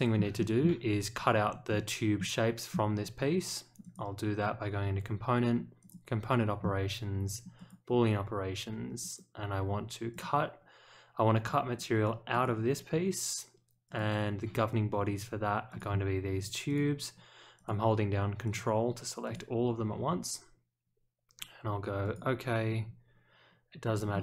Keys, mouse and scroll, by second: 0.3 shift+middle click, 1.7 middle click, 2.1 middle click, 3.8 click, 5.8 click, 7.5 click, 9.0 click, 10.1 click, 12.3 click, 13.8 click, 15.7 click, 16.6 ctrl+click, 17.5 ctrl+click, 18.4 ctrl+click, 19.2 ctrl+click, 22.0 click, 24.1 middle click.